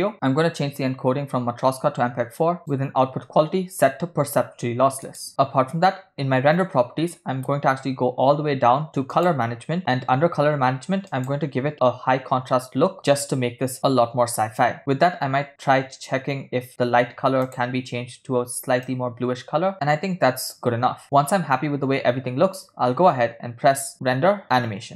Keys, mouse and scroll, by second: 0.8 click, 1.6-3.1 scroll down 3, 3.1-5.3 drag, 8.7-9.1 scroll down 1, 9.4-9.8 drag, 9.8 scroll down 2, 11.5-13.0 drag, 14.9 click, 18.1 click, 24.0-24.9 drag.